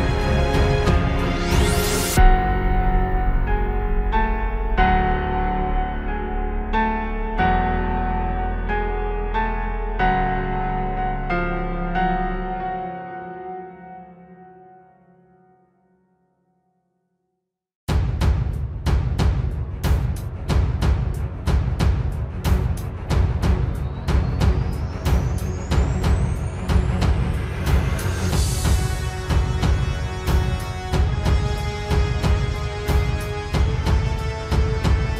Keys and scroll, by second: 0.4 ctrl+space, 1.3 ctrl+alt+space, 1.5 ctrl+-, 1.9 ctrl+space, 3.5 ctrl+space, 4.2 ctrl+space, 5.0 ctrl+space, 5.5 ctrl+space, 6.1 ctrl+space, 6.8 ctrl+space, 7.0 ctrl+shift+i, 9.3 ctrl+space, 14.5 ctrl+space, 15.0 ctrl+space, 18.0 ctrl+z, 20.2 ctrl+space, 21.3 ctrl+d, 25.3 ctrl+space, 31.2 ctrl+space, 31.4 ctrl+s, 34.8 ctrl+space.